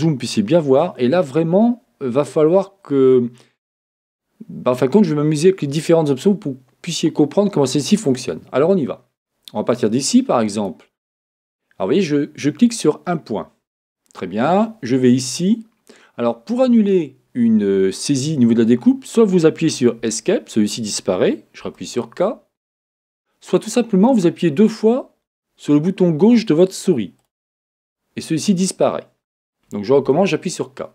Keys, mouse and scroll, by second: 20.1 Escape, 27.4 click, 30.0 k.